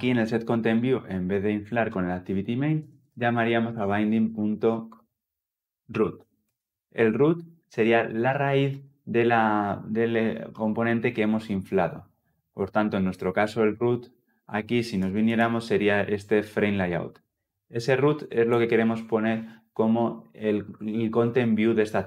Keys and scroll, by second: 6.3 Return, 17.0 ctrl+alt+Left, 17.5 ctrl+alt+Left.